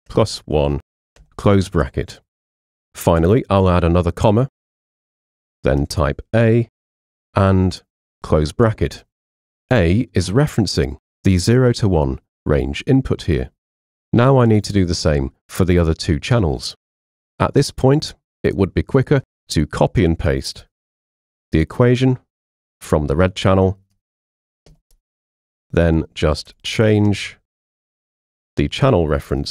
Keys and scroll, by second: 0.0-1.2 typing, 3.9 ', 5.1 space, 5.8 a, 7.0 shift+0, 8.1 Return, 21.2 super+c, 24.7 super+v, 26.5 BackSpace, 27.1 shift+g, 28.9 BackSpace, 29.3 shift+g.